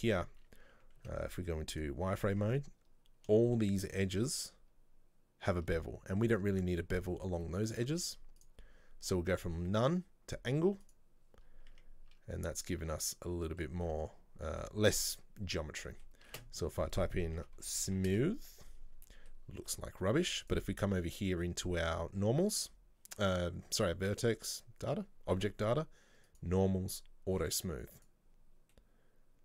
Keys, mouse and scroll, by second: 0.6 Tab, 1.1 z, 2.2-2.5 scroll up 1, 2.5 Tab, 3.5-6.5 shift+middle drag, 6.5 Tab, 7.8 scroll down 1, 8.0 z, 10.9 click, 11.5 scroll down 2, 11.8 Tab, 12.2 Tab, 12.6 scroll up 1, 12.9 Tab, 13.2-14.6 middle drag, 14.6 Tab, 14.7-16.4 middle drag, 16.4 space, 17.8 o, 18.8 scroll down 2, 19.2-20.5 middle drag, 20.5 click, 26.4 click, 28.1 click, 28.8-29.4 middle drag.